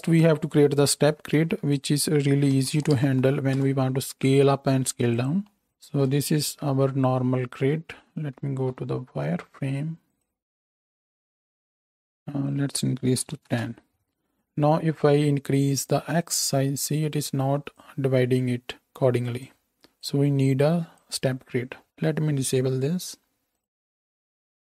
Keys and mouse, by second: 1.4 shift+a, 8.8-10.4 middle drag, 8.8 z, 10.4-24.7 drag.